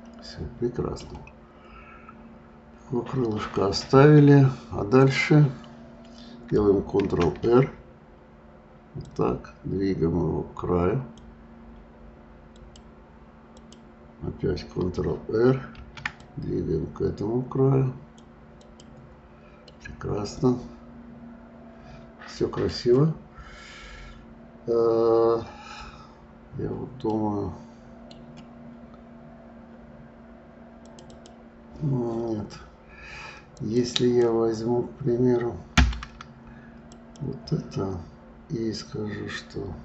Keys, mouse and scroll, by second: 2.0 scroll up 2, 4.9 click, 6.9 ctrl+r, 13.5 click, 15.7 ctrl+r, 18.6 click, 19.6-25.7 middle drag, 27.1-30.1 middle drag, 30.8 right click, 36.9 click.